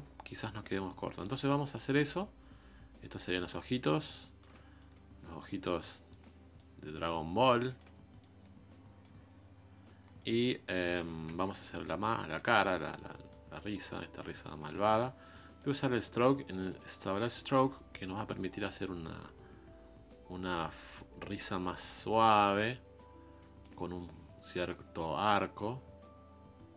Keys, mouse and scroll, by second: 1.1-4.4 drag, 4.8-10.0 ctrl+drag, 10.0 scroll down 3, 10.2 middle click, 10.5 scroll up 2, 11.3 KP_1, 12.4 f, 13.3-14.7 drag, 14.7 ctrl+z, 19.2-21.8 drag, 24.8-26.7 drag.